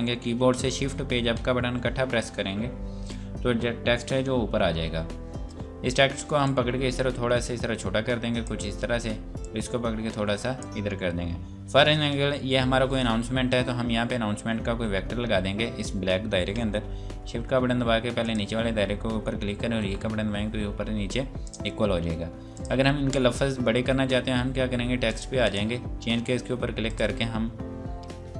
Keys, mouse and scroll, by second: 1.4 Page_Up, 5.2 Page_Up, 5.3 scroll down 1, 6.4 click, 14.0 scroll up 1, 18.2 click, 19.8 e, 21.5 click, 25.1 click.